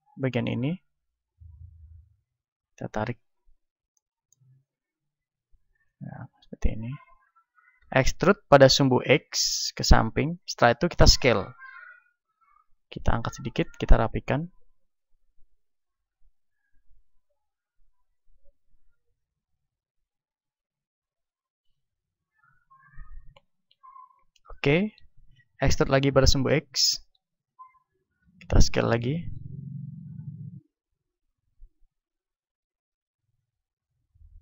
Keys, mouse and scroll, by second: 0.6 middle click, 1.4-3.4 drag, 3.6-5.8 middle drag, 5.8-7.8 drag, 7.8 e, 10.6-12.2 drag, 11.2 s, 12.8-15.8 drag, 15.8 s, 16.7-21.0 drag, 22.4-25.4 drag, 25.4 e, 27.4-34.4 drag, 28.0 s.